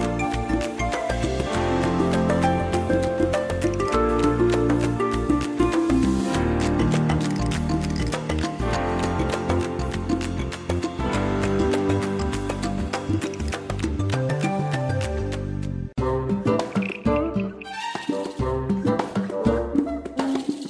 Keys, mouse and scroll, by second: 4.7 ctrl+z, 6.1 click, 6.5 space, 7.1 ctrl+scroll down 1, 7.8 space, 8.5 ctrl+scroll up 1, 15.2 space, 15.8 click.